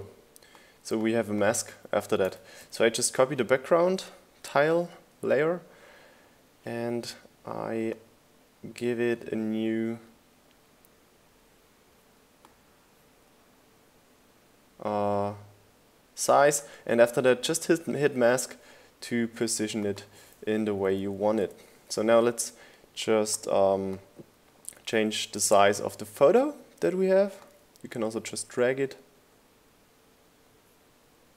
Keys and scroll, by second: 4.8 super+v, 22.7-23.7 typing.